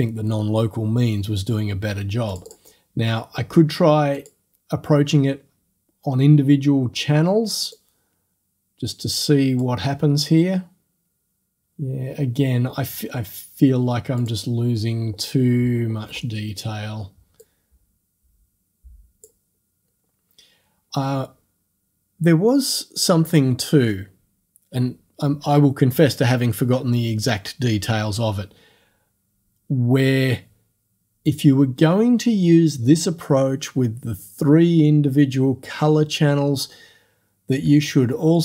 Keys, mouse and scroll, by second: 2.3 click, 4.2 click, 7.7-10.9 drag, 14.2 click, 15.3-15.7 scroll down 2, 15.9-16.3 scroll up 2, 17.5-19.5 drag.